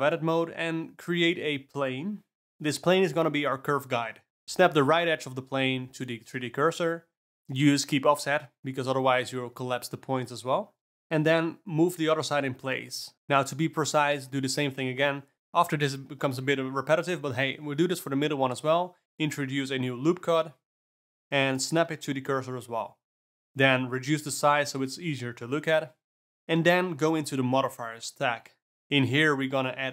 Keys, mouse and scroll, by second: 1.7 Tab, 4.3 n, 4.6 shift+s, 5.7 ctrl+z, 6.0 shift+s, 7.2 middle click, 7.8 click, 8.3 g, 10.2 click, 10.3 Tab, 11.0 click, 11.5 shift+s, 12.1 Tab, 12.4 shift+s, 13.6-14.6 ctrl+middle drag, 15.3 click, 15.4 Tab, 16.1 click, 16.6 shift+s, 17.2 Tab, 17.8 click, 18.4 Tab, 19.7 alt+middle click, 20.6 shift+s, 23.5 a, 23.7 s, 25.6-29.1 middle drag, 29.1 click.